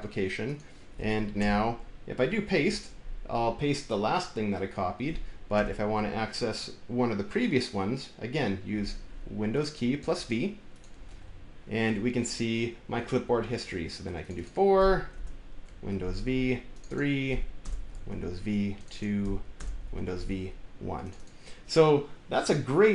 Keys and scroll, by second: 1.2 Return, 2.4 ctrl+v, 5.4 Return, 10.9 super+v, 14.2 ctrl+v, 15.0 Return, 15.7 super+v, 16.9 ctrl+v, 17.4 Return, 17.8 super+v, 19.0 ctrl+v, 19.4 Return, 19.7 super+v, 21.0 ctrl+v.